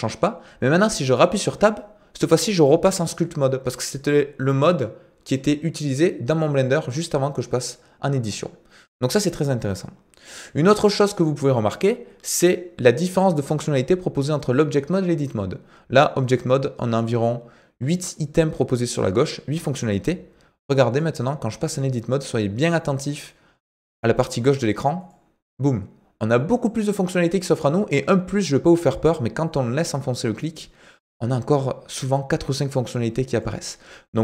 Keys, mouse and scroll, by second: 10.3-11.1 drag, 21.0-25.2 drag, 29.4-33.5 drag.